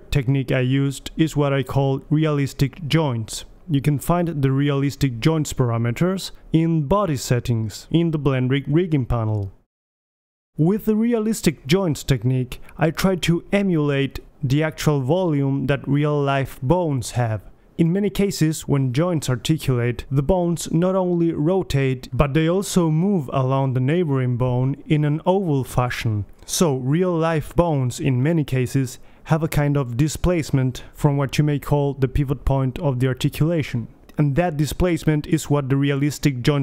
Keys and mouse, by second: 2.6-5.5 drag, 31.8 g.